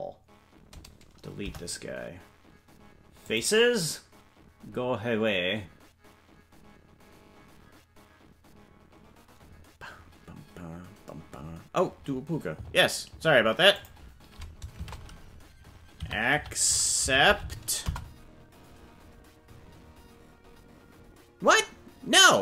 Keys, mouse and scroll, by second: 1.4 ctrl+l, 1.4 Delete.